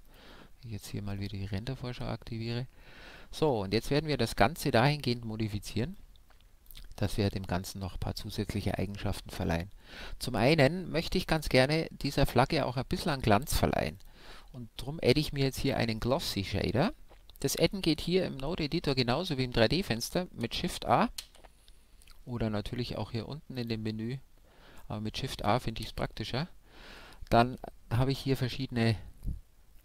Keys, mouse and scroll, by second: 1.1 click, 6.0-9.0 drag, 13.9-15.6 drag, 17.9-19.7 drag, 21.2 shift+a, 23.5-25.4 drag, 25.9 shift+a.